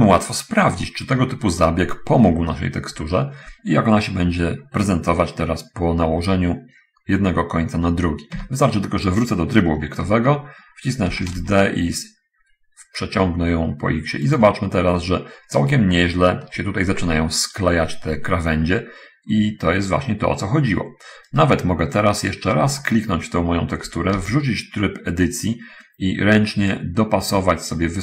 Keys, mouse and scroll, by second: 1.0 scroll down 1, 1.8 shift+middle click, 8.7 Tab, 11.4 shift+d, 11.7 x, 14.6 click, 15.4-16.1 scroll up 2, 16.2 shift+middle click, 21.6 right click, 23.2 shift+middle click, 24.5 shift+Tab, 25.3 right click, 26.8-28.0 drag.